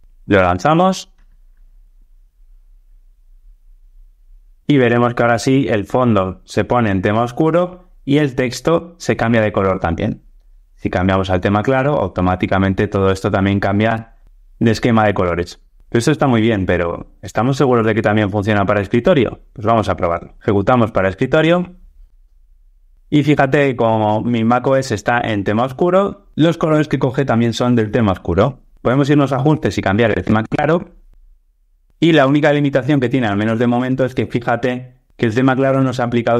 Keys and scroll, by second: 0.0 alt+Return, 20.4 ctrl+r.